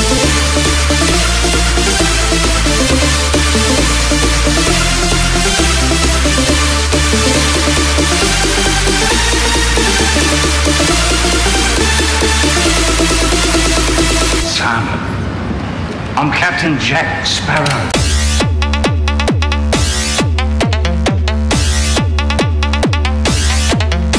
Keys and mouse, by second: 16.6 g.